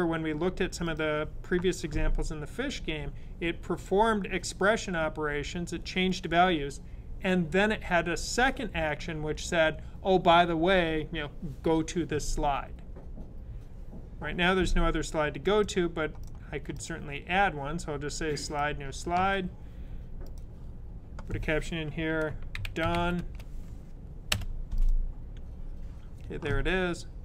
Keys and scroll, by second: 22.2-23.3 typing.